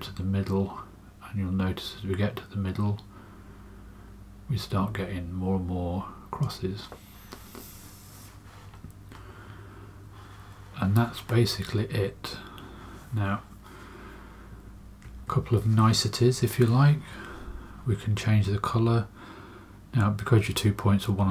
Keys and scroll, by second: 15.0 space.